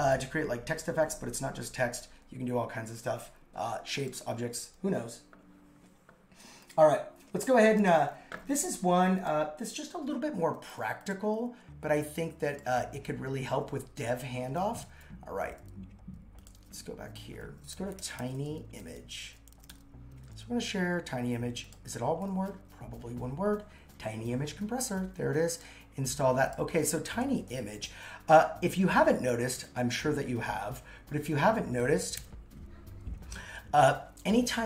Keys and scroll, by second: 10.0 super+c, 17.5-20.2 typing, 27.1 super+x, 32.2 super+1.